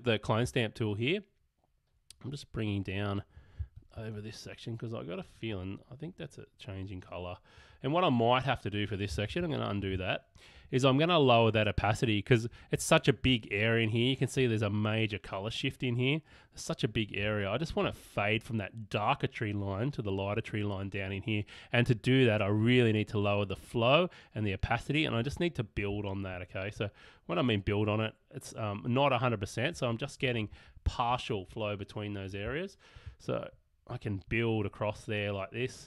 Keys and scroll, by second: 9.3 alt+super+z, 13.3 space, 17.2 space.